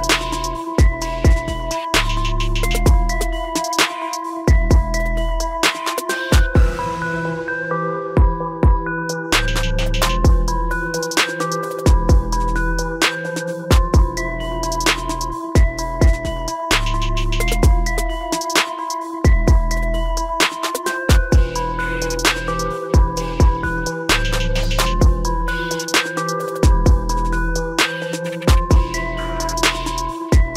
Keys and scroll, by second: 7.9 ctrl+t, 11.8 ctrl+-.